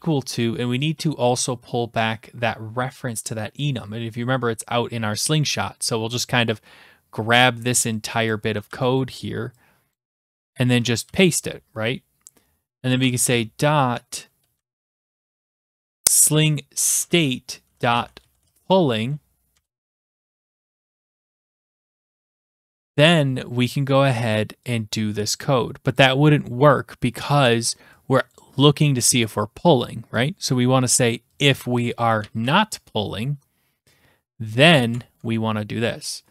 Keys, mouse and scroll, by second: 8.3 click, 8.7 ctrl+c, 9.9 click, 10.5 click, 11.1 ctrl+v, 12.9 BackSpace, 14.3-19.5 typing, 21.3-22.3 drag, 25.9 click, 28.3 click, 29.1 click, 29.2 click, 30.5 click, 31.4 click, 32.2 typing, 34.7 click, 34.9 Tab.